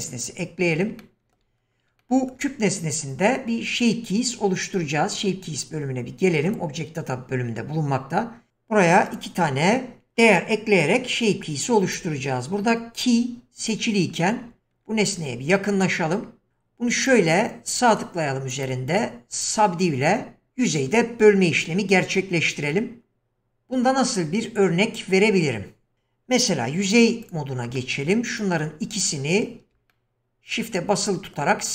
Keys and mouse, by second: 1.0-1.4 shift+drag, 2.2 shift+middle click, 6.5 click, 9.1 click, 15.2 Tab, 17.2 right click, 18.6 right click, 19.6 middle click, 22.4-25.1 middle drag, 26.7 3, 27.2 click, 27.7-29.7 middle drag, 29.9-31.4 middle drag.